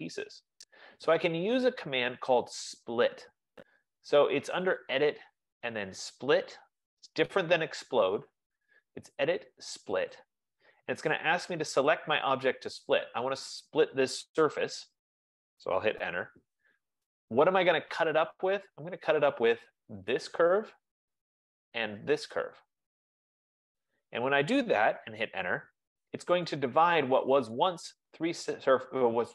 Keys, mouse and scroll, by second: 1.4 click, 5.0 click, 10.4 click, 13.4 click, 16.3 Return, 19.1 Return, 20.3 click, 22.8 click, 22.9 F15, 25.4 Return, 26.5 click, 27.8 click.